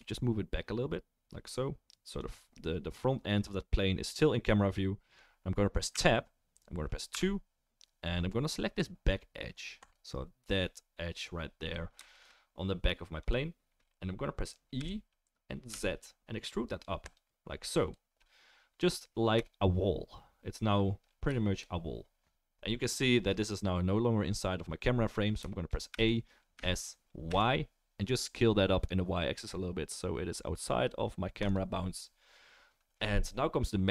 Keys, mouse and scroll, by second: 2.5-12.0 right drag, 5.9 Tab, 7.1 2, 9.9 click, 9.9 middle click, 12.0-19.3 shift+middle drag, 14.8 e, 19.3 right click, 19.3 KP_0, 19.4 middle click, 19.5 right click, 20.1-22.4 middle drag, 22.4 right click, 23.2-31.0 middle drag, 25.9 a, 26.5 s, 31.0-33.9 right drag.